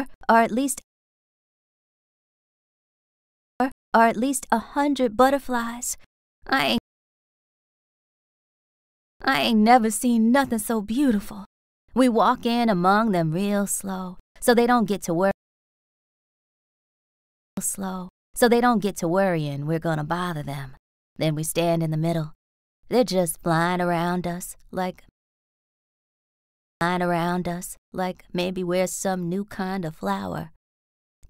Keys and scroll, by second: 0.2 r, 0.7 space, 1.2 t, 3.5 space, 3.8 r, 5.4 r, 6.7 space, 7.3 s, 8.6 space, 8.9 r, 12.9 s, 15.2 space, 16.3 a, 17.4 space, 18.4 r, 23.6 a, 25.0 space, 26.3 BackSpace, 26.7 space, 27.6 t, 29.6 BackSpace, 30.1 r.